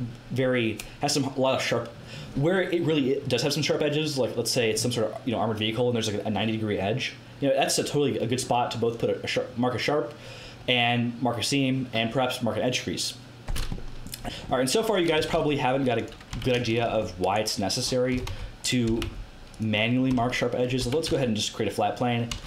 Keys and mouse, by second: 13.7 middle click, 14.5-17.3 middle drag, 15.1 g, 16.3 Tab, 17.3 right click, 18.1 g, 18.8 g, 20.1 Tab, 20.8 Tab, 21.0 a, 22.3 a.